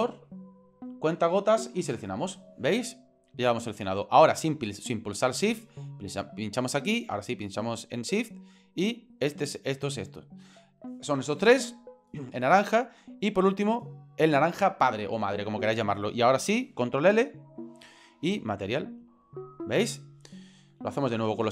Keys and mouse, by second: 6.1 right click, 8.6 shift+right click, 9.1 shift+right click, 13.9 shift+right click, 17.5 ctrl+l.